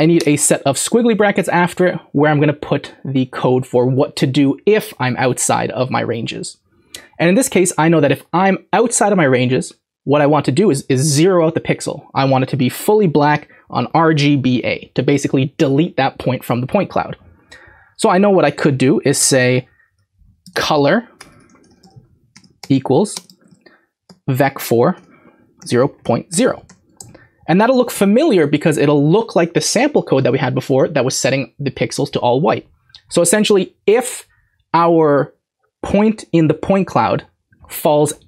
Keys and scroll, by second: 0.0-0.3 typing, 20.4-24.0 typing, 26.0-27.0 typing, 28.4-30.1 typing.